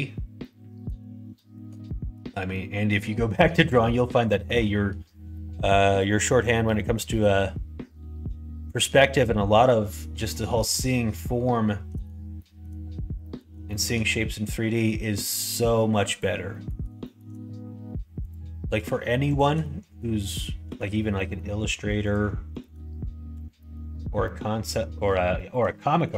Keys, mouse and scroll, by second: 0.3 middle click, 1.3 shift+middle click, 1.8 middle click, 2.5 middle click, 3.3 middle click, 4.2 middle click, 5.0 middle click, 6.2 middle click, 6.6 middle click, 8.7 middle click, 10.7-12.0 middle drag, 12.3 shift+middle click, 13.2 middle click, 13.6 shift+middle click, 14.1 middle click, 16.0 click, 16.4 middle click, 17.0 shift+middle click, 17.7 2, 18.2 click, 19.3 shift+click, 19.5 middle click, 20.6 f, 21.1 middle click, 22.0 click, 22.5 shift+click, 23.3 f, 23.5 middle click, 24.2 middle click, 25.3 shift+middle click, 25.8 middle click.